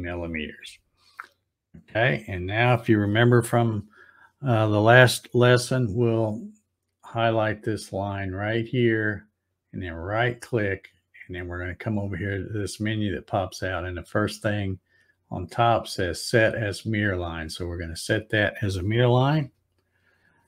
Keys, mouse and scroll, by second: 1.0-1.3 scroll up 2, 1.9 scroll up 1, 8.7 click, 9.5 right click, 16.5 click.